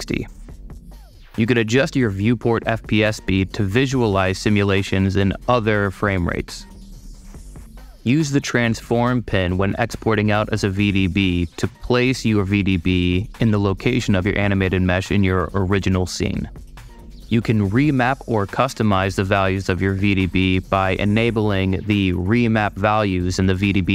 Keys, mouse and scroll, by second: 3.0 click, 4.6 click, 8.0 click, 8.5-11.2 drag, 18.0 middle click, 18.7 super+middle click, 21.1 super+click, 23.8 super+middle click.